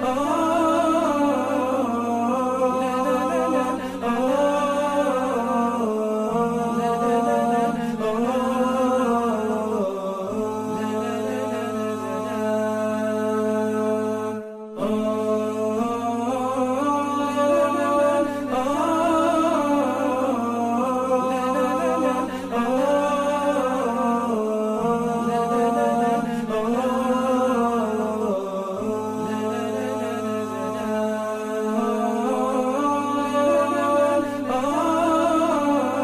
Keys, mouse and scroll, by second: 1.7 ctrl+2, 2.5-4.1 typing, 5.3 typing, 7.3 double click, 18.3 double click, 19.0 ctrl+z, 19.5 ctrl+z, 19.9 double click, 21.8 double click, 26.8 typing, 27.0 Return, 34.6 ctrl+shift+[, 35.2 ctrl+z.